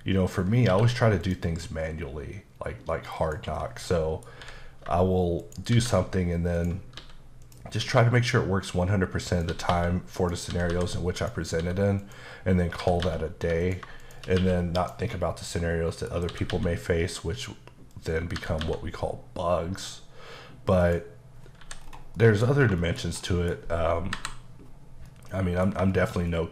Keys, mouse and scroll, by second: 0.7 q, 1.2 click, 3.2 click, 3.6 middle click, 4.4 h, 5.4 shift+right click, 5.7 shift+a, 6.6 click, 7.0 s, 7.4 click, 7.8 s, 9.3 click, 9.5-11.6 typing, 10.2 click, 11.2 click, 12.0 click, 12.8 typing, 13.6 click, 14.0 shift+click, 14.4 q, 14.8 click, 15.5 middle click, 16.2 scroll up 1, 16.3 typing, 17.9 click, 18.4 typing, 20.8 click, 21.4 scroll down 2, 21.6 h, 22.2 middle click, 22.5-23.3 scroll down 3, 22.8 shift+middle click, 23.3 middle click, 24.1 KP_5, 25.1 middle click, 25.9 shift+middle click.